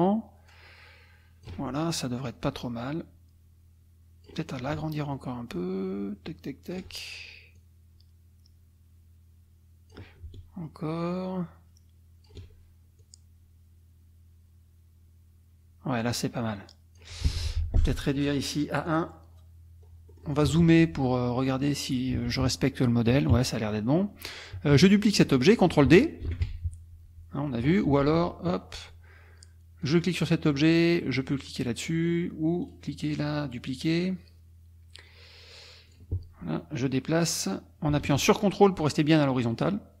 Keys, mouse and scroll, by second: 2.3-4.5 drag, 5.1-6.9 ctrl+shift+drag, 7.6-10.1 drag, 11.1-12.4 ctrl+shift+drag, 13.0-17.2 drag, 18.9 click, 20.1 middle click, 20.1-20.8 scroll up 1, 21.1 middle click, 22.1 KP_Subtract, 23.3 KP_Subtract, 24.0 click, 24.7 KP_Subtract, 26.2 ctrl+d, 28.0 ctrl+z, 29.8 click, 32.7 click, 35.9 click, 37.5-40.0 drag.